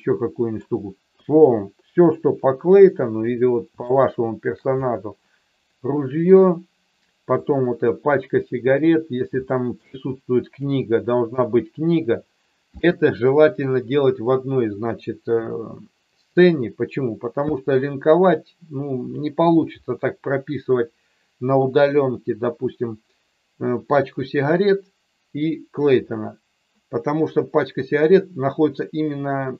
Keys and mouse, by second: 1.0 q, 2.4 KP_1, 3.8 shift+middle click, 7.3 click, 9.4 shift+middle click.